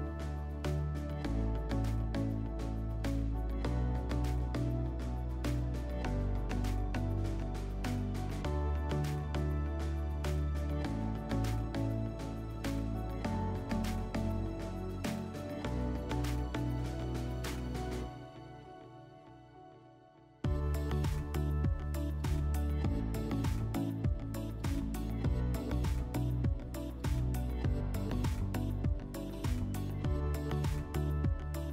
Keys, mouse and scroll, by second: 2.8 click, 16.3 click, 17.3 click, 20.3 click, 22.2 click, 23.3 click, 24.9 click.